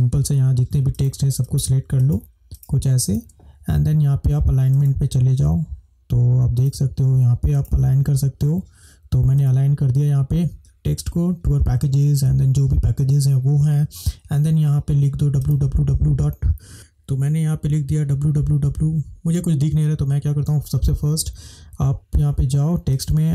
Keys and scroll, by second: 19.5 BackSpace.